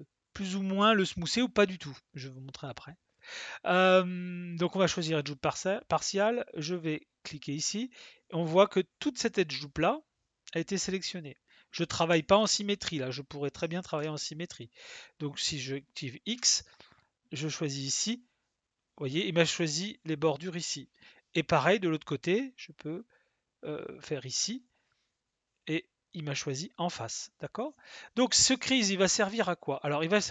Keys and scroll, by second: 12.1 space, 13.8 ctrl+z, 16.3 x.